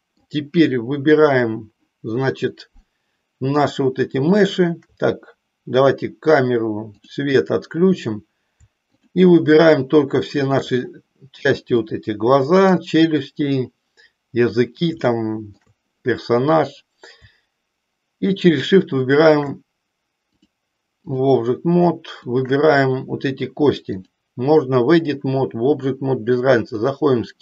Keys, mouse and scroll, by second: 7.0 click, 9.5 shift+click, 11.9-12.9 middle drag, 15.0 shift+middle click, 20.3-21.3 drag, 22.1 shift+click, 24.0-25.1 drag, 26.8 click.